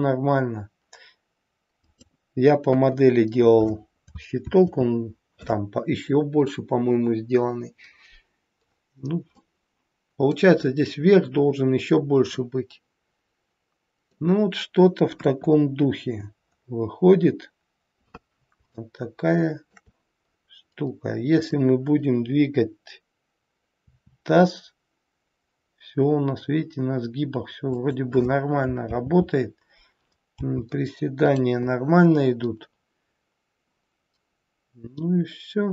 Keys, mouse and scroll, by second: 4.4 ctrl+z, 8.6-9.4 scroll down 2, 9.4 middle click, 12.2 middle click, 15.1 KP_1, 16.4-17.0 scroll up 3, 17.0-18.1 scroll down 2, 18.7 shift+middle click, 20.1 scroll up 1, 21.2 click, 23.7 r, 30.2 g.